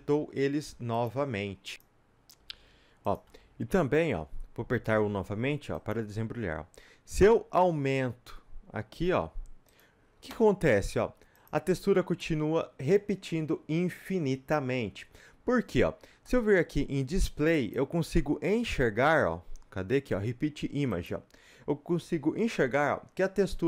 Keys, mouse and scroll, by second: 0.0 s, 1.0 click, 1.2 g, 3.1 click, 3.2 a, 5.9 u, 7.2 s, 9.8-11.0 drag, 11.0 s, 12.3-23.6 middle drag, 13.4-15.2 scroll up 1.